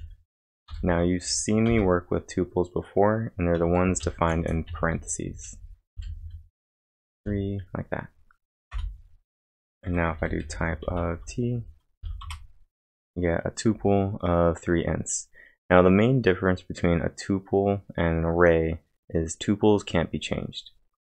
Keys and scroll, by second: 0.7 =, 0.8 space, 1.7 shift+(, 3.5-7.2 typing, 8.7 Return, 9.6-12.0 typing, 12.2 Return, 14.4-15.2 typing.